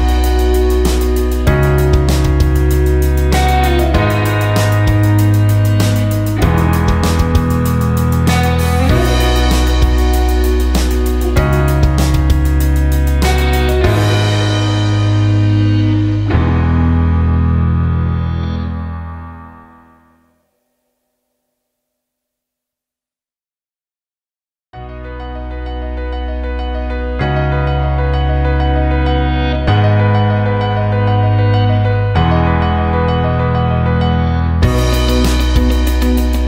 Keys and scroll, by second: 4.9 ctrl+space, 9.8 space, 12.7 space.